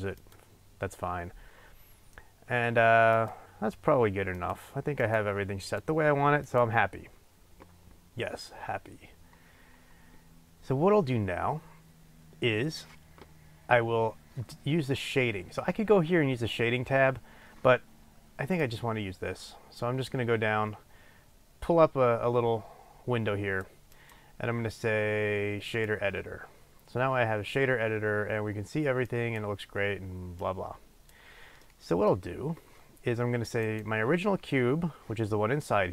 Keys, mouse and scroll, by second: 18.6-23.0 drag, 24.2 click, 25.0 click, 30.6 click, 31.5-33.6 middle drag, 33.6 click.